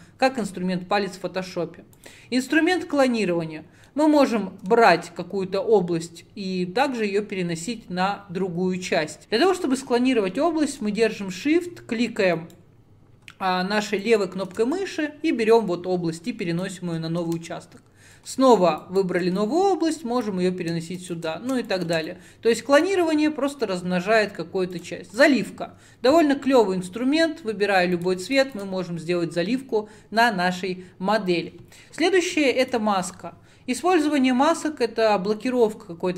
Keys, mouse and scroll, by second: 3.0-9.2 middle drag, 9.2 ctrl+z, 12.4 shift+right click, 14.3 shift+click, 14.8-19.0 drag, 19.4-21.2 drag, 22.1-36.1 drag.